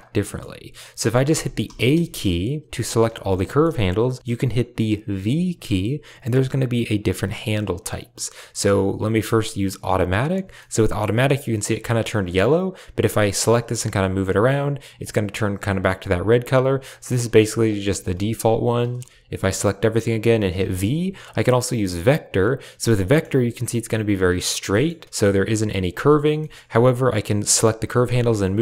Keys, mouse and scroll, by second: 0.1 middle click, 1.2 a, 1.5 a, 1.9 shift+middle click, 2.9 a, 3.0 a, 3.3 shift+middle click, 4.2 t, 5.2 v, 10.4 click, 10.7 shift+click, 13.3 g, 13.8 r, 15.6 click, 15.8 g, 16.9 click, 17.1 r, 17.7 r, 19.0 a, 19.2 a, 20.4 v, 22.9 shift+middle click, 24.6 middle click, 26.2 shift+middle click, 27.4 click, 27.9 g.